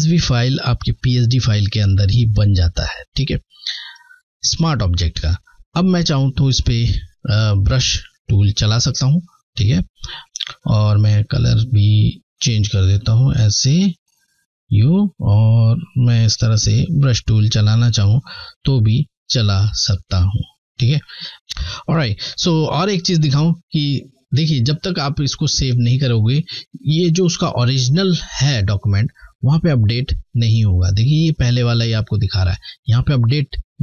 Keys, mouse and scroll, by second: 6.6 typing, 8.4 click, 8.5 click, 9.9 click, 10.8 click, 11.8 click, 28.5 click, 28.6 click, 28.6 typing, 31.2 typing.